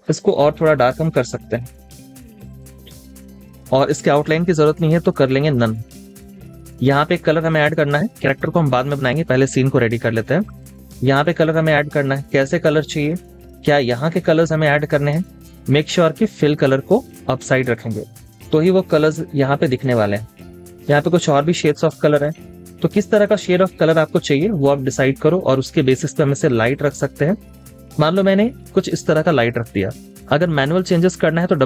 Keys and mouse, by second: 5.8 double click, 10.8 double click.